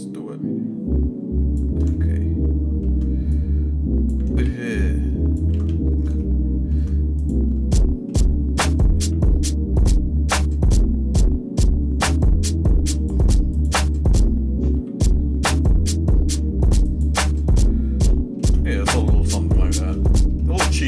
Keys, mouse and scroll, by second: 0.2-1.7 drag, 1.9 shift+middle click, 3.5 click, 4.2 ctrl+z, 4.7 click, 5.5 ctrl+z, 6.2 shift+middle click, 7.2 click, 7.7 shift+middle click, 9.0 g, 13.5 click, 14.7 g, 17.3-18.4 shift+middle drag, 19.1 shift+scroll down 1, 19.5 shift+middle click, 20.0 middle click, 20.5 middle click.